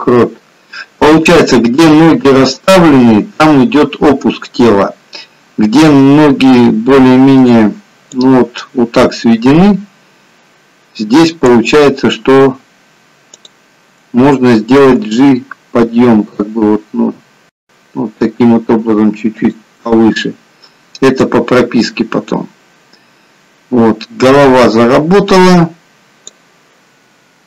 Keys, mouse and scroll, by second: 8.5 click, 13.5 click, 15.1 g, 21.4 click.